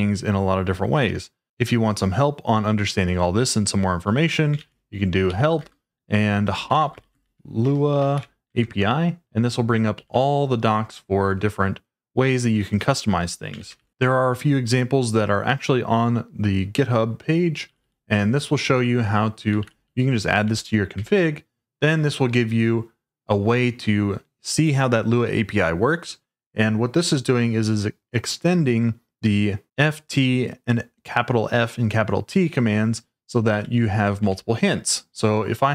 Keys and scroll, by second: 4.6-10.9 typing, 13.3-14.2 typing, 17.6 typing, 19.6-20.9 typing, 20.9 Escape, 33.5 j, 34.2 w.